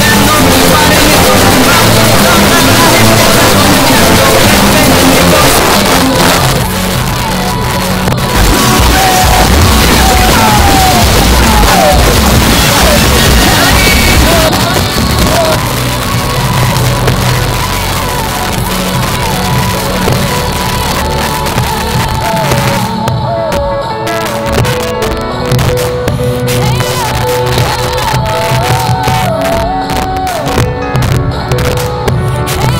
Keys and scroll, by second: 5.6 Page_Down, 14.5 Page_Down.